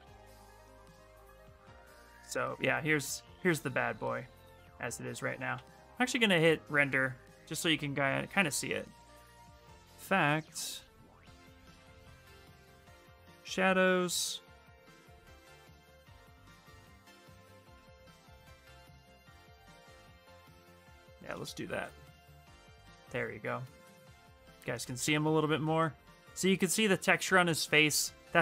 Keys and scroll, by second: 5.3 shift+r, 21.5 shift+r, 25.8 shift+r.